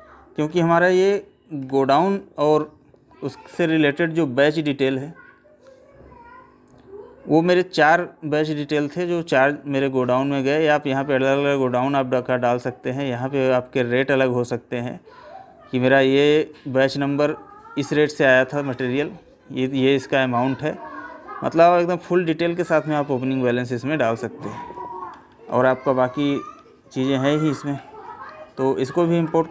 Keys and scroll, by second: 0.5 Left, 3.9 Right, 25.1 Right, 27.8 Left.